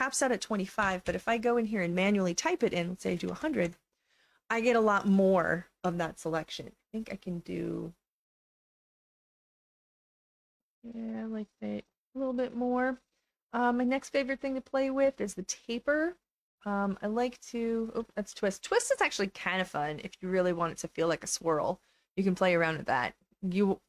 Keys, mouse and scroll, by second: 10.0 click, 10.8-12.5 drag, 16.5-17.9 drag, 18.1 ctrl+z, 19.0-22.6 drag.